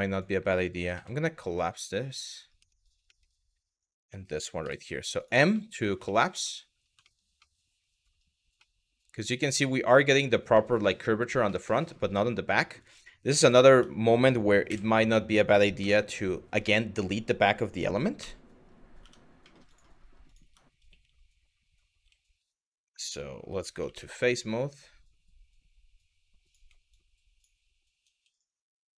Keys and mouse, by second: 0.6 m, 2.4 middle click, 2.8 middle click, 3.5 click, 4.2 m, 5.2 middle click, 5.8 shift+middle click, 6.2 middle click, 6.7 shift+middle click, 7.1 middle click, 8.3-9.3 middle drag, 9.6 middle click, 10.3 middle click, 11.1 middle click, 12.2 middle click, 13.3 Tab, 14.3 KP_7, 15.4 KP_Divide, 17.8 z, 19.9 click, 20.0 Tab, 20.5 z, 23.5 3, 24.0-26.2 drag, 26.6 ctrl+click, 28.1-28.9 shift+drag.